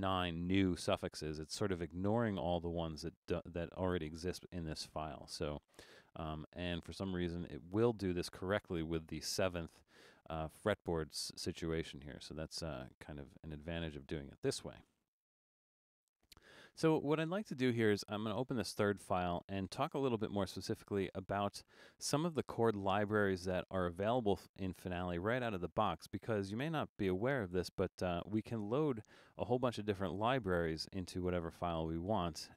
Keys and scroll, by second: 14.9 BackSpace.